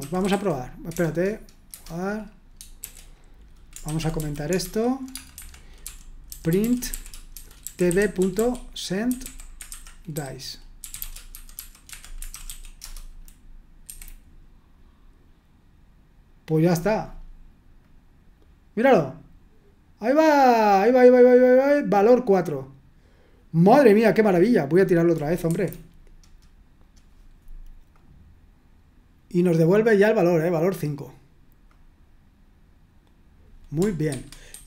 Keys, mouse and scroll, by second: 0.0-1.7 typing, 2.8-12.8 typing, 5.3 Escape, 13.8 F5, 17.8 click, 23.6 click, 25.5 F5, 27.9 click, 30.2 click, 31.7 click, 34.0 super+1, 34.5 super+2.